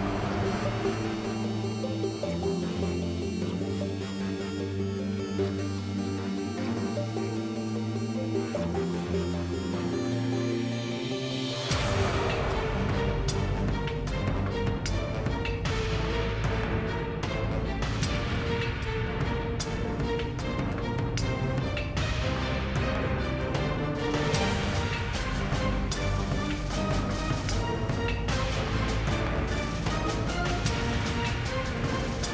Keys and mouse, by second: 0.3-0.7 middle drag, 0.7 Tab, 0.8 Tab, 1.0 alt+c, 1.5 Tab, 1.9 KP_1, 3.2-4.0 typing, 4.3 Tab, 6.3 z, 6.4 z, 7.0 Tab, 8.2-8.6 middle drag, 8.3 KP_Decimal, 8.9-9.4 middle drag, 10.4-12.1 right drag, 11.2 ctrl+x, 12.0 ctrl+b, 14.5 Tab, 14.6 Tab, 15.3 ctrl+x, 16.6 ctrl+x, 16.7 Tab, 17.2 Tab, 20.1 ctrl+x, 21.5 KP_Decimal, 22.1 middle click, 22.8 Tab, 23.5 Tab, 24.2 click, 24.3 z, 24.6 z, 25.6 ctrl+b, 27.1-30.5 typing, 32.1 z.